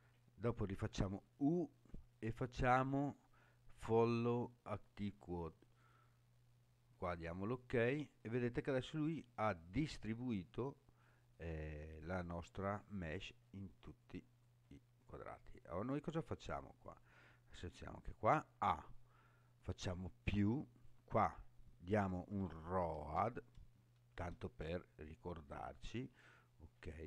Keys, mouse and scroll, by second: 1.1 u, 13.1-14.3 scroll down 7, 14.6-15.6 scroll up 7, 16.9-17.3 scroll down 2, 18.1 a, 19.9 click, 20.8-25.6 drag.